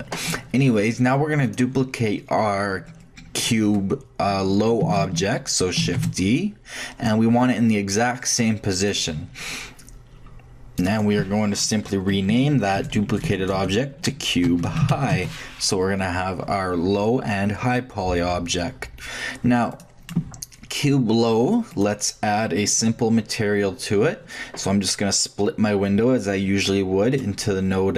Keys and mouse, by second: 1.4-3.4 drag, 5.8 shift+d, 10.6 middle click, 10.8-12.9 drag, 12.9 BackSpace, 13.0 BackSpace, 13.4 BackSpace, 13.5 BackSpace, 19.7-21.4 drag, 21.5 click, 21.7-23.6 drag, 26.2 click, 27.1 click.